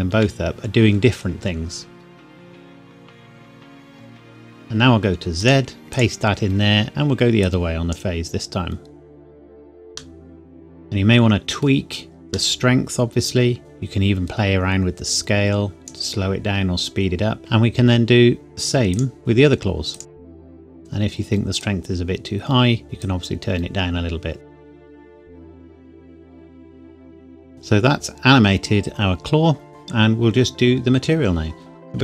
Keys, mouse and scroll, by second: 0.5-0.9 scroll down 1, 2.2-3.1 scroll up 1, 5.3 click, 10.1 middle click, 13.6 click, 20.2 click, 21.9 click, 25.0 click, 25.5 middle click, 25.7 click, 25.8 KP_Enter, 25.9 click, 26.1 KP_Enter, 26.3 click, 26.7 middle click, 27.0 click, 27.4-28.8 scroll down 1, 28.8 middle click.